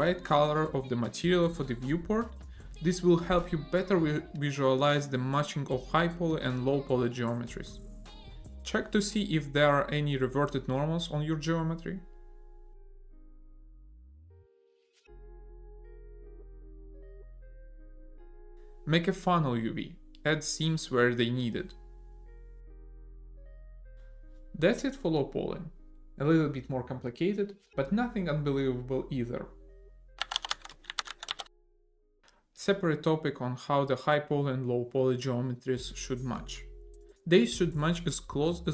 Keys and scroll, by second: 3.5 a, 5.5 ctrl+l, 7.7 a, 14.2 Tab, 14.5 a, 16.5 ctrl+n, 17.5 Tab, 18.2 a, 18.9 Tab, 19.5 a.